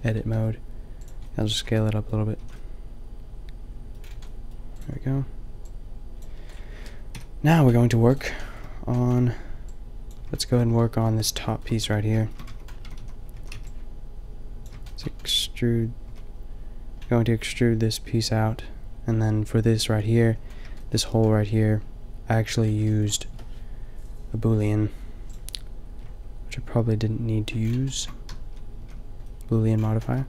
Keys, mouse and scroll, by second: 0.2 s, 1.5 Tab, 2.4 a, 5.4-6.2 drag, 7.1 KP_5, 11.6 middle drag, 12.4 Tab, 12.8 a, 12.9 a, 13.3 a, 13.5 b, 16.0 a, 20.2 middle click, 28.3 a, 28.7 a.